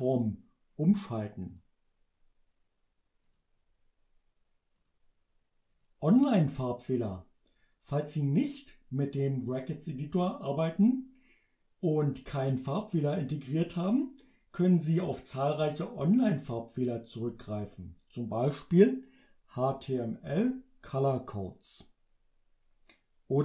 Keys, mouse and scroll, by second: 0.7 click, 1.5 click, 3.3 click, 4.8 click, 5.7 click.